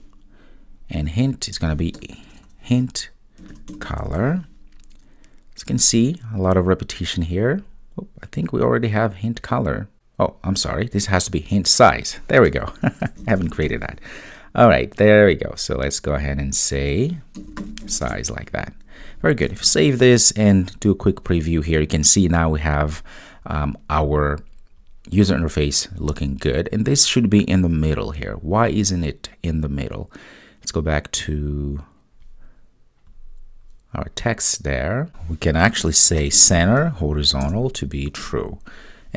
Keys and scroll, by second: 19.6 super+s, 37.5 Return.